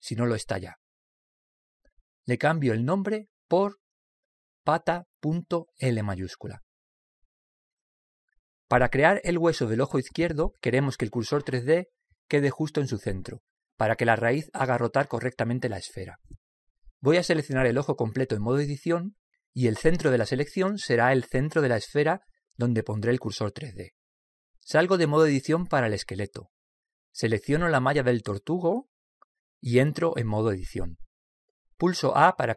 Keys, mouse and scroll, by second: 1.8-6.8 drag, 10.4-12.1 middle drag, 26.5 Tab, 28.6 right click, 31.0 Tab.